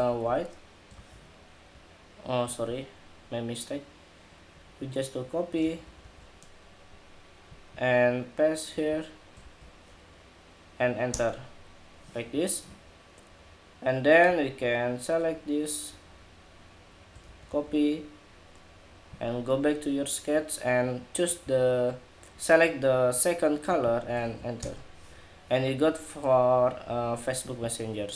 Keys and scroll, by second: 0.6 super+v, 5.3 super+c, 9.1 super+v, 16.9 super+c, 23.9 super+v.